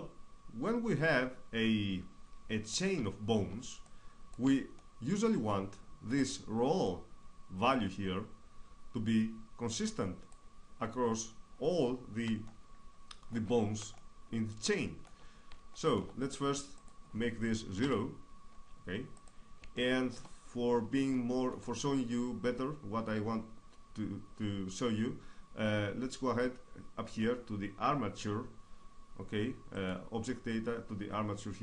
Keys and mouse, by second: 3.6-5.2 drag, 6.6-8.1 drag, 12.2-16.5 middle drag, 16.5-18.1 drag, 21.1-26.1 middle drag, 29.5-31.6 drag.